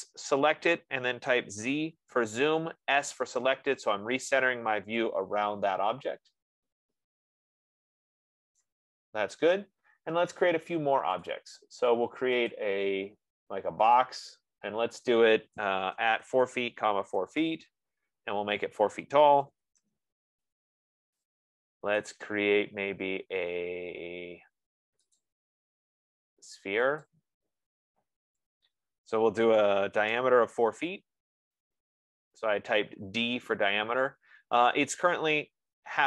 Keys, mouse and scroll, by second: 0.1 click, 1.9 z, 2.5 Return, 3.4 Return, 4.8 scroll, 9.1 right click, 11.7 click, 13.0 click, 14.3 click, 16.0-18.2 typing, 19.4-20.2 typing, 22.4 right click, 25.4 click, 27.4 click, 28.7 click, 30.1-31.5 typing, 32.7 click.